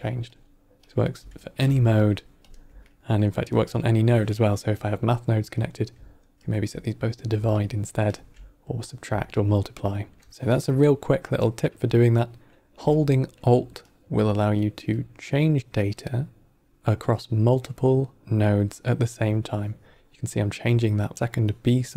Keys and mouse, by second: 0.2-0.8 alt+drag, 1.9-3.1 alt+drag, 3.5 middle click, 4.0 drag, 5.5-6.4 drag, 7.5-8.0 alt+drag, 9.2-10.1 alt+drag, 10.3 drag, 10.3 middle click, 14.8-21.9 alt+drag.